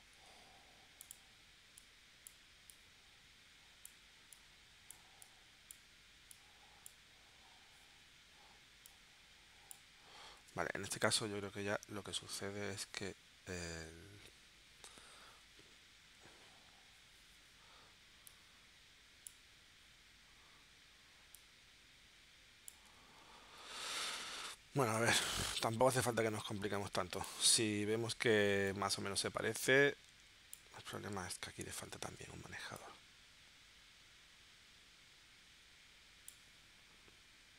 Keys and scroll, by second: 0.2 a, 10.4 super+z, 12.0 shift+w, 23.4 super+z, 23.9 super+z, 24.9 v, 26.9 a, 31.2 super+z, 32.0 shift+c.